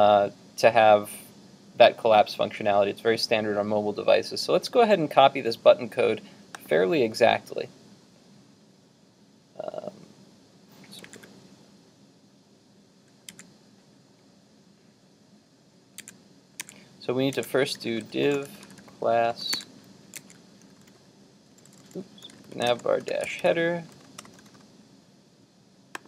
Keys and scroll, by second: 11.1 super+Tab, 13.5 super+Tab, 16.1 super+Tab, 16.7 super+Tab, 17.4 super+Tab.